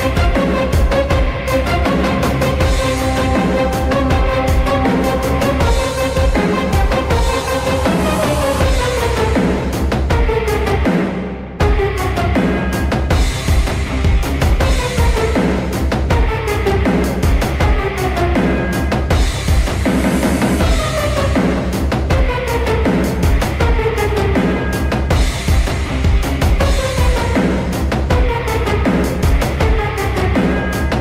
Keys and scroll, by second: 0.2 e, 1.0 w, 2.0-3.3 typing, 14.5-16.0 typing, 17.7-20.0 typing, 18.3 F2, 21.8-23.2 typing, 25.8 t, 27.1-31.0 typing.